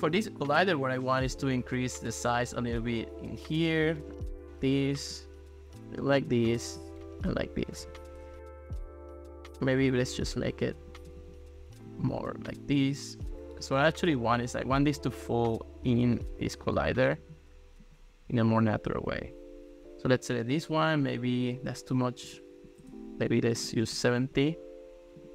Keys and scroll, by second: 11.2 super+z, 22.3 5, 22.9 BackSpace, 23.6 0, 23.9 Return.